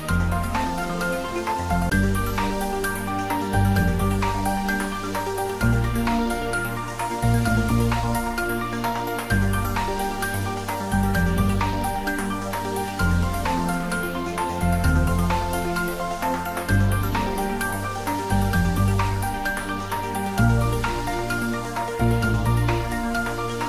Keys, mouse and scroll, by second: 2.5-2.9 scroll down 1, 5.0-8.2 middle drag, 8.2 click, 10.4 x, 10.9 click, 11.6-14.1 middle drag, 14.1 click, 15.4 x, 15.9 click, 23.2 click.